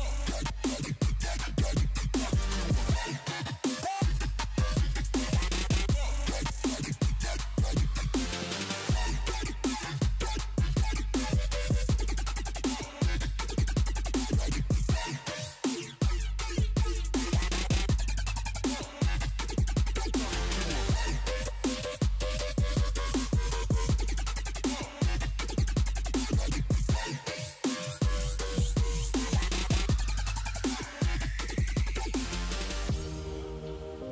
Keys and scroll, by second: 0.0-2.5 typing, 2.9 Return.